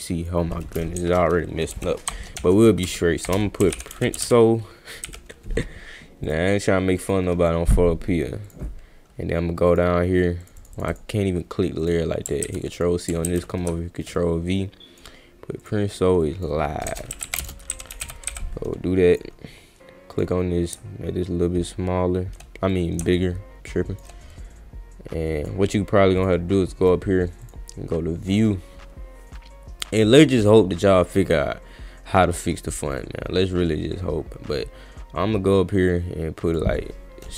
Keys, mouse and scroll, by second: 1.7 f, 2.4 Caps_Lock, 2.9 f, 3.8 r, 4.2 c, 6.2 click, 6.9 click, 8.5 click, 9.7 click, 10.4 click, 10.6 click, 10.8 click, 10.9 click, 11.8 click, 12.4 ctrl+c, 12.7 click, 13.3 ctrl+v, 14.1 click, 15.6 click, 16.2 click, 17.3 s, 17.4 space, 18.0 v, 18.3 e, 19.1 click, 20.1 click, 22.7-24.0 drag, 24.3-25.5 drag, 26.2 click, 26.8 click, 27.4 click, 28.3 click, 36.5 click.